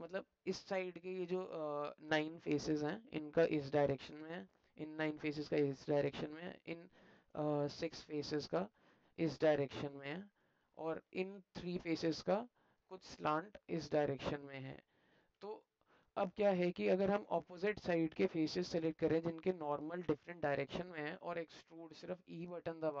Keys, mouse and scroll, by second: 1.4 click, 3.3 alt+click, 4.2 alt+click, 5.7 alt+click, 6.7 alt+click, 8.8 click, 10.3 alt+click, 12.3 alt+middle click, 13.7 click, 14.4 click, 15.5-16.9 alt+middle drag, 17.4 alt+middle click, 18.3 alt+middle click, 19.2 alt+middle click, 19.7 alt+middle click, 21.0 middle click, 21.1 alt+click.